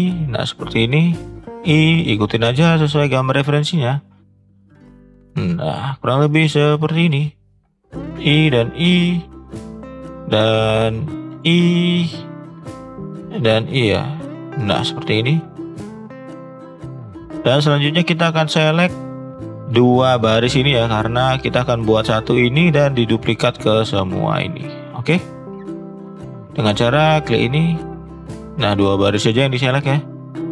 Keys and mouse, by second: 1.2 i, 4.6 i, 5.8 i, 7.2 i, 8.4 i, 9.8 shift+middle drag, 11.3 i, 15.8-16.1 shift+middle drag, 16.7 shift+middle click, 18.2 shift+middle drag, 19.1 shift+middle click, 20.4 click, 25.9-27.1 drag, 27.4 shift+drag, 27.6 shift+click, 28.2 shift+click, 28.7 shift+click, 29.7-30.1 shift+drag, 30.4-30.5 shift+drag.